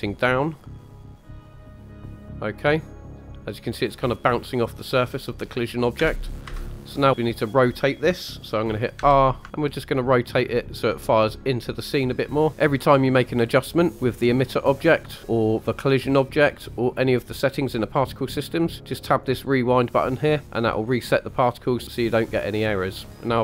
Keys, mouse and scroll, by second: 0.1 click, 0.6 click, 2.8-3.3 middle drag, 3.9 middle click, 5.9 space, 6.4 KP_1, 7.1 click, 8.9 r, 10.5 ctrl+click, 15.3-15.6 middle drag, 19.0 click, 20.4 click, 20.4 middle click.